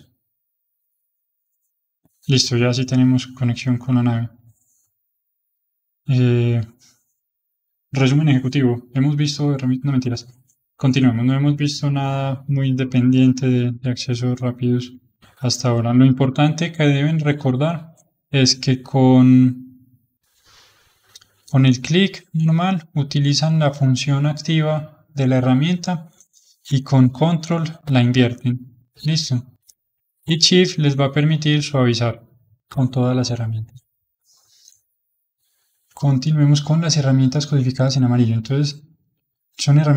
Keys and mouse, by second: 1.1-10.2 middle drag, 13.7 n, 14.4-19.9 middle drag, 19.9-25.1 drag, 26.6-29.0 ctrl+drag, 29.0-30.3 middle drag, 30.3-35.0 shift+drag.